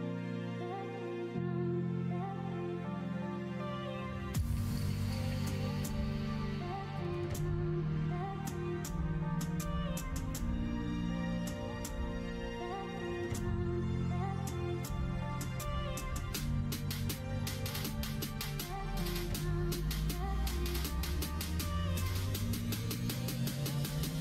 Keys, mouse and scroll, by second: 0.6 ctrl+z, 2.6 b, 4.1 middle click, 5.3 KP_1, 5.7 KP_3, 11.0 g, 15.2 e, 21.0-23.9 middle drag.